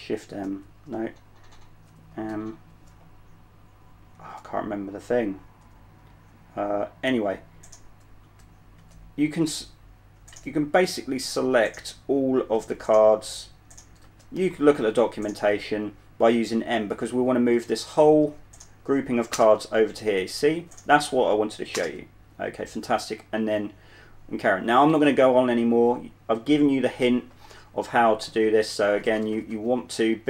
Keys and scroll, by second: 0.3-2.1 typing, 2.4 ctrl+m, 8.5-9.1 typing, 10.6 ctrl+m, 12.6 m, 14.3 m, 17.4-18.5 typing, 19.6-22.1 typing, 28.6-30.2 typing.